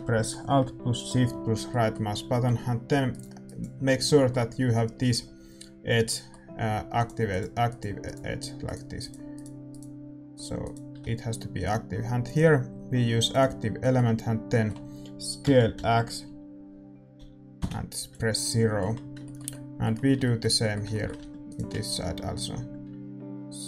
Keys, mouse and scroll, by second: 2.2-8.0 middle drag, 3.1-6.0 right drag, 6.9-13.3 right drag, 13.3-15.4 drag, 13.7-17.5 middle drag, 15.4 s, 18.4-23.6 middle drag, 21.1 a, 21.4-23.6 right drag.